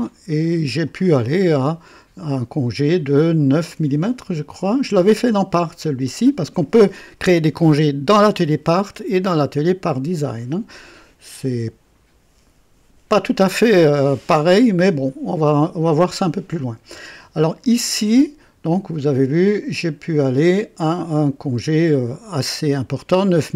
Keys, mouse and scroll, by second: 0.0-1.0 drag, 1.1-1.4 scroll up 1, 4.6 click, 22.5 click.